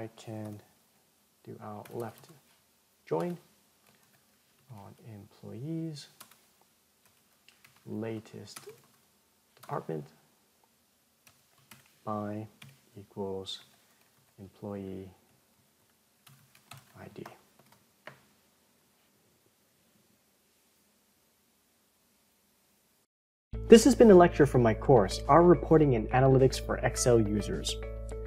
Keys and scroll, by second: 17.7 ctrl+Return.